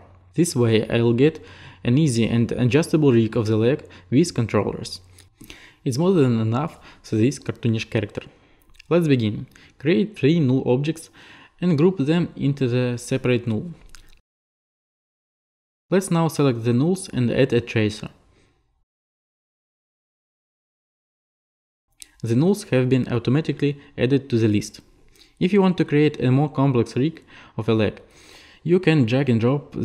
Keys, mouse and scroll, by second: 9.9 ctrl+click, 13.3 shift+middle click, 13.8 alt+g, 14.8 click, 15.2 click, 15.2-16.2 typing, 15.2 click, 16.0-17.1 right drag, 21.4-22.5 right drag, 23.7-24.9 right drag.